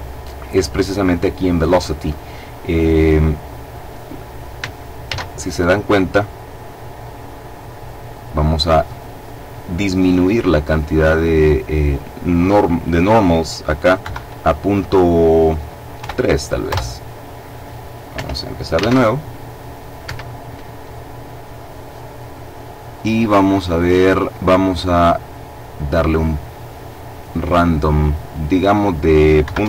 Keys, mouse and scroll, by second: 4.7 alt+a, 7.8 click, 13.7 KP_Decimal, 15.7 KP_3, 16.3 KP_Enter, 17.8 Escape, 18.5 alt+a, 19.7 Escape, 24.5-28.5 drag, 29.1 KP_Decimal, 29.3 KP_5, 29.3 KP_Enter.